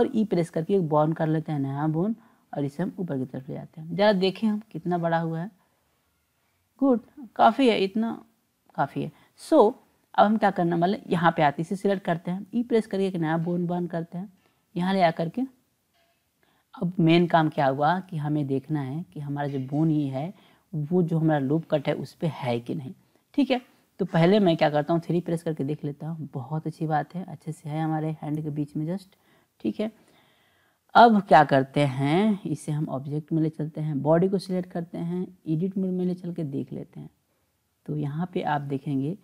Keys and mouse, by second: 0.2 e, 5.1-8.2 drag, 11.0 click, 12.5 e, 25.3 KP_3, 32.6 click, 33.9 drag, 35.2-36.4 drag, 38.7-39.2 drag.